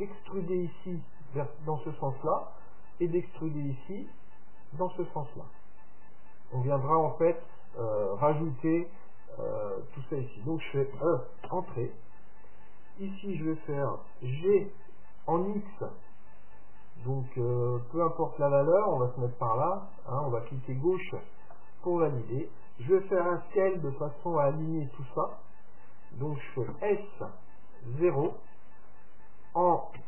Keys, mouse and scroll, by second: 11.0 e, 14.5 g, 26.7 s.